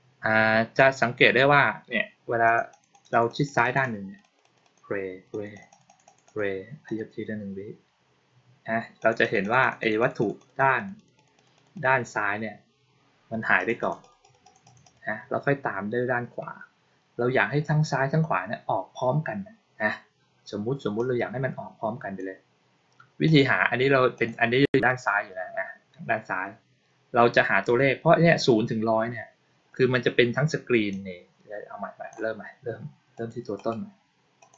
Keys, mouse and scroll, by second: 2.3 click, 2.6 click, 2.8 click, 3.0 click, 3.1 click, 3.3 click, 3.5 click, 3.7 click, 4.1 click, 4.3 click, 4.5 click, 5.2 click, 5.4 click, 5.6 click, 5.7 click, 5.9 click, 6.1 click, 6.7 click, 8.8 click, 9.1 click, 9.3 click, 9.5 click, 9.7 click, 9.8 click, 10.0 click, 10.2 click, 10.4 click, 10.6 click, 10.8 click, 11.0 click, 11.2 click, 11.4 click, 11.6 click, 13.4 click, 13.7 click, 13.9 click, 14.1 click, 14.3 click, 14.5 click, 14.7 click, 20.8-22.0 drag, 23.1 click, 24.0 click, 30.8-32.0 drag, 33.1 click, 33.5 right click, 34.3 click.